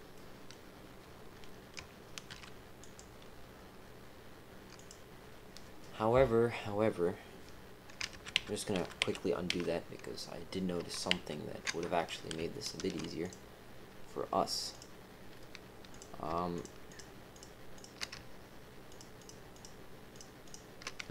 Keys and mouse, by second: 0.1 middle click, 2.3 ctrl+r, 8.1 ctrl+z, 8.3 ctrl+z, 8.7 ctrl+z, 9.0 ctrl+z, 9.5 ctrl+z, 11.1 ctrl+z, 12.7 ctrl+r, 15.9 click, 16.5 shift+click, 16.8 shift+click, 17.3 shift+click, 18.8 shift+click, 19.5 shift+click, 20.1 shift+click, 20.4 shift+click.